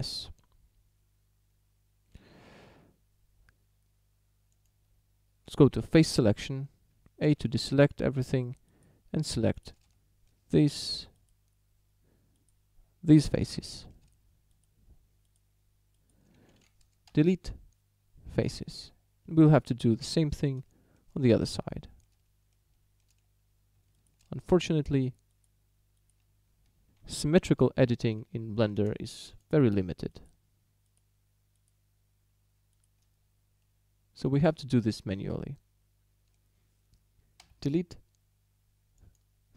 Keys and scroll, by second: 0.3 Tab, 7.3 a, 17.1 Delete, 27.1 shift+d, 37.4 Delete.